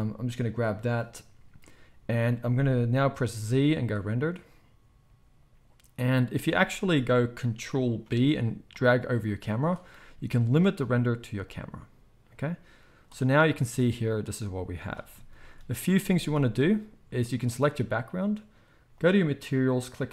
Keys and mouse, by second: 1.3-3.2 drag, 1.3-3.2 middle drag, 1.3-3.2 right drag, 3.2 z, 5.1-6.1 drag, 5.1-6.1 middle drag, 5.1-6.1 right drag, 6.6 ctrl+s, 6.8 ctrl+s, 8.0 ctrl+b, 14.4 z, 16.0 ctrl+s, 16.2 ctrl+s, 17.3-18.9 drag, 19.0 drag, 19.1-20.1 right drag, 19.7-20.1 drag, 19.7-20.1 middle drag.